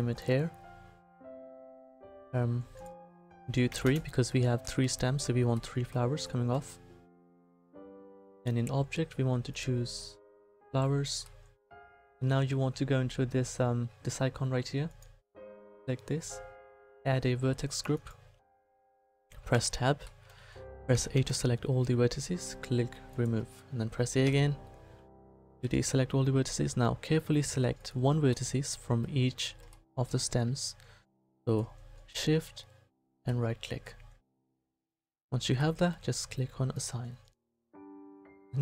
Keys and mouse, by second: 0.9-4.6 middle drag, 8.4-11.4 middle drag, 16.8-17.9 middle drag, 18.7-20.2 middle drag, 19.5 Tab, 20.9 a, 21.1 a, 24.2 a, 35.1-36.7 middle drag, 37.0-38.6 drag.